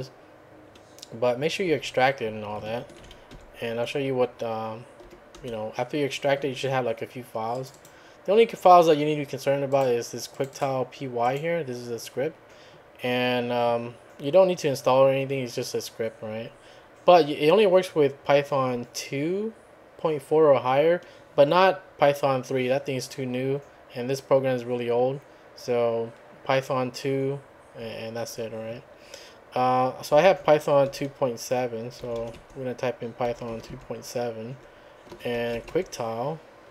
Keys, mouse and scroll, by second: 1.6 `, 3.0 ctrl+a, 3.3 ctrl+3, 5.0 l, 5.4 Return, 7.6 click, 9.7 click, 10.3 click, 11.2 click, 30.1-33.5 typing, 33.7 Tab, 35.1-36.0 typing.